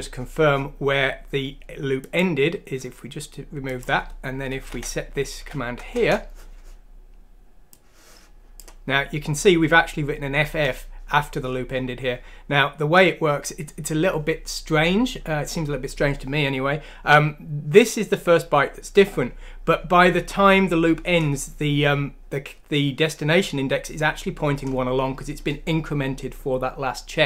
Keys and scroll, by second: 4.7 BackSpace, 5.4 F6, 5.9 Return.